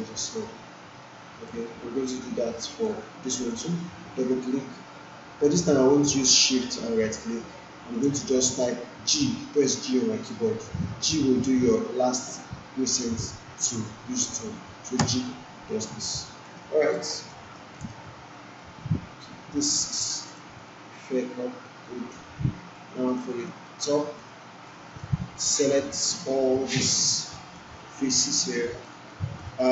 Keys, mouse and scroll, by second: 0.2 alt+click, 0.4-1.6 alt+drag, 6.5 shift+Num_Lock, 6.5 click, 7.2-8.2 shift+right drag, 15.0 g, 16.4 alt+middle click, 16.7 alt+click, 17.0 alt+right click, 17.5 alt+middle click, 18.5 right click, 20.2-23.0 drag, 23.0 click, 23.4 alt+middle click, 24.6-26.2 right drag, 27.5-28.5 alt+click, 28.5 alt+middle click, 29.1 alt+click, 29.5-29.7 right click.